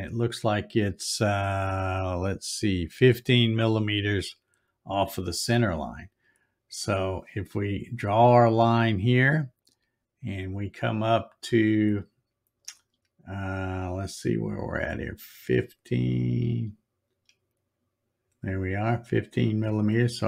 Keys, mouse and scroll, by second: 9.6 click.